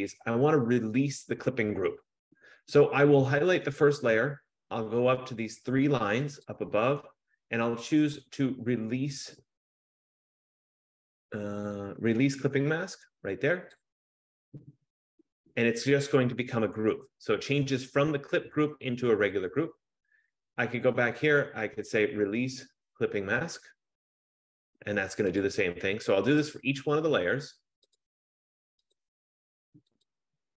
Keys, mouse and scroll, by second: 6.5 click, 9.2 F15, 13.8 click, 19.6 click, 21.2 click, 23.8 click, 25.5 click, 26.5 click, 28.0 click, 29.1 click, 30.2 click.